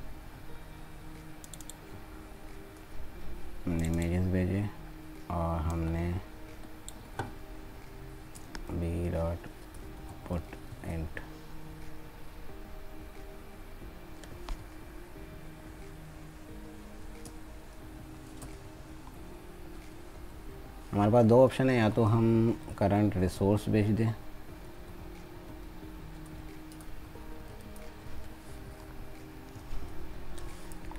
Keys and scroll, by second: 7.2 ctrl+c.